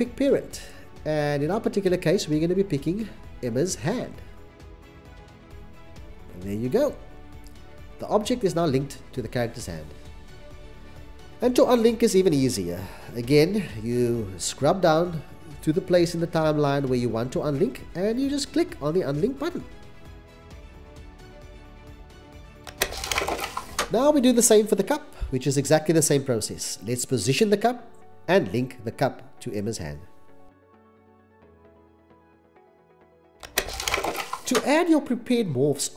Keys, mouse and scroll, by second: 10.9 c, 11.2 c, 11.6 c, 13.0 c, 13.0 x, 27.4 1, 27.5 3, 27.7 Return, 27.7 0, 28.9 c.